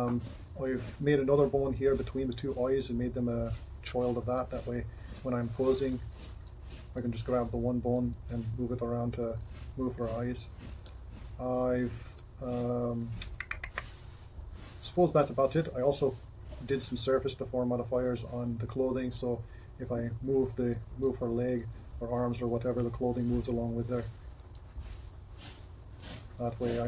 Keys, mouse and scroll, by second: 5.4 ctrl+Tab, 6.3 Tab, 7.9 g, 19.1 r, 21.5 r, 24.5 r.